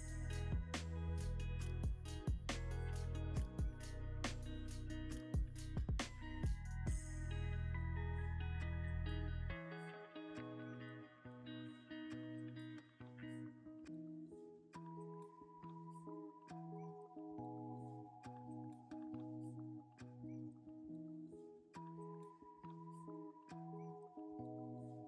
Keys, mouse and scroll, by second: 0.6 middle click, 1.5 g, 1.9 x, 3.1 r, 3.1 z, 4.9 scroll, 4.9-5.4 scroll up 1, 5.4 middle click, 6.1 scroll down 1, 6.7 middle click, 8.8 g, 9.0 x, 10.2 g, 10.5 y, 11.6 middle click, 13.2 n, 16.7 ctrl+c, 16.9 typing, 17.2 Escape, 17.9 middle click, 19.4 s, 24.2 ctrl+c, 24.3 typing.